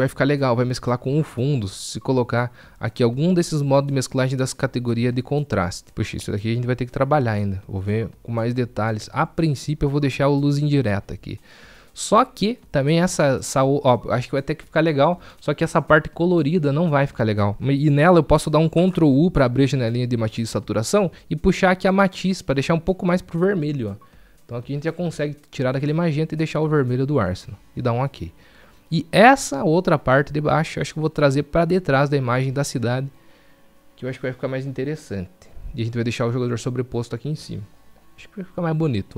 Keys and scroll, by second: 18.6 ctrl+u, 22.5 ctrl+u.